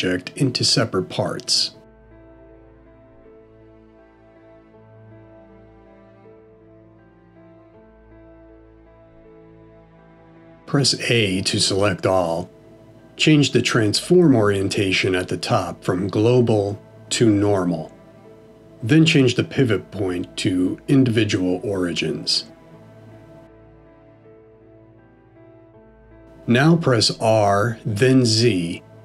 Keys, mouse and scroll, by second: 1.1 click, 2.0 g, 5.4 ctrl+z, 6.2 middle click, 10.8 a, 16.7 click, 26.3 r.